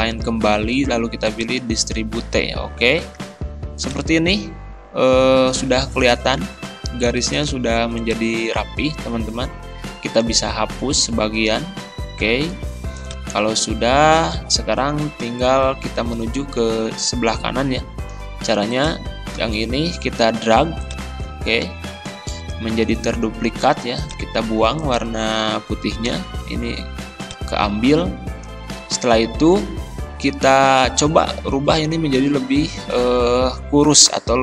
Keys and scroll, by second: 11.6 Delete, 26.2 Delete.